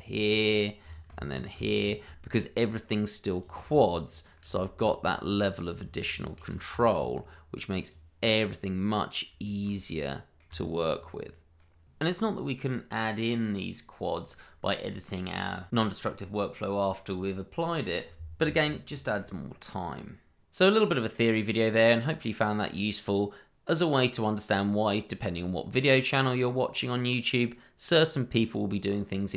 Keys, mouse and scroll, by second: 1.5 ctrl+r, 1.8 click, 4.4 ctrl+r, 4.7 click, 6.4 ctrl+r, 6.7 click, 8.2 middle click, 9.4 shift+middle click, 10.0 middle click, 10.4 Tab, 11.0-11.5 scroll down 1, 11.6 middle click.